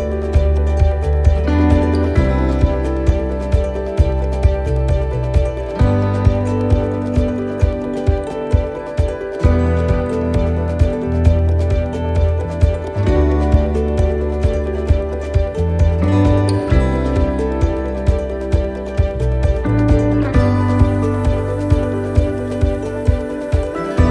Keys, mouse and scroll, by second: 3.2 scroll down 2, 3.2-3.6 scroll up 3, 5.0 scroll down 2, 5.4 middle click, 5.8-6.3 scroll down 3, 6.5 shift+middle click, 7.4-7.8 scroll up 3, 7.9 shift+middle click, 8.4 scroll up 1, 8.8 shift+middle click, 9.4 middle click, 10.1 shift+middle click, 11.1 scroll up 1, 12.5 right click, 13.9 l, 14.6 x, 16.3 right click, 16.9 l, 18.0 shift+d, 19.4 click, 21.0 click.